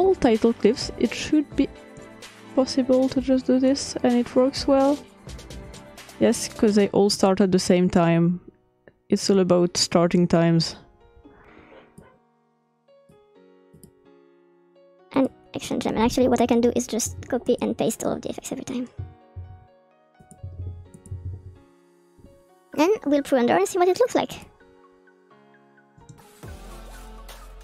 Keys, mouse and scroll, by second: 3.2 click, 3.9-5.4 drag, 5.9-7.2 drag, 7.4-8.7 drag, 9.4-11.7 drag, 12.0-15.0 drag, 15.1-16.4 drag, 17.0 ctrl+c, 17.5 ctrl+click, 19.4 ctrl+p, 20.2 click, 20.6 ctrl+p, 21.0 click, 24.3-27.6 drag.